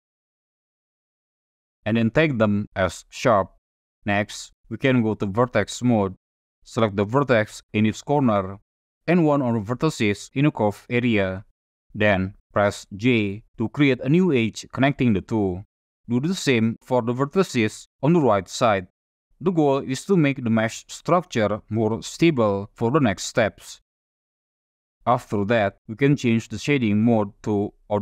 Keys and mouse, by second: 0.4 ctrl+click, 1.3 click, 5.1 1, 7.7 click, 10.1 shift+click, 12.8 j, 15.3 click, 16.5 shift+click, 17.2 j, 19.0 Tab, 20.1 click, 20.6 middle click, 21.4 middle click, 24.5 F5, 24.9 click, 26.9 right click.